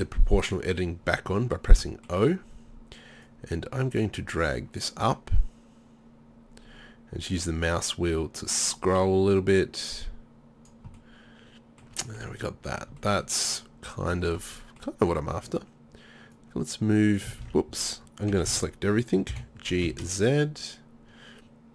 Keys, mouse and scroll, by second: 0.0 o, 3.3-8.8 drag, 13.6 middle click, 16.4-17.5 drag, 17.5 ctrl+z, 18.4 a, 18.5 a, 19.3 g.